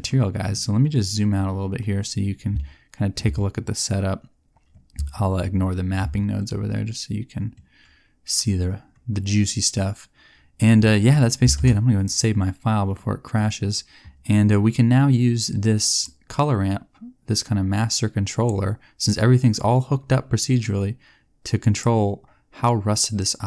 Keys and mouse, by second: 11.5 ctrl+s, 21.8 middle click.